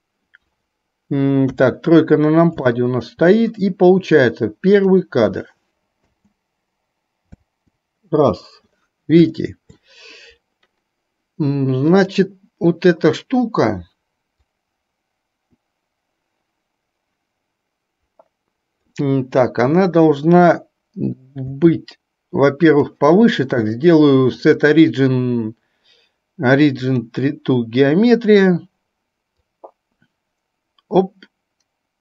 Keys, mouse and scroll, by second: 1.6 KP_3, 2.8-3.2 shift+middle drag, 4.8 click, 6.2 space, 7.6 space, 9.6 shift+middle click, 14.6-19.1 drag, 21.6 s, 23.7-27.2 drag, 29.6-32.0 drag.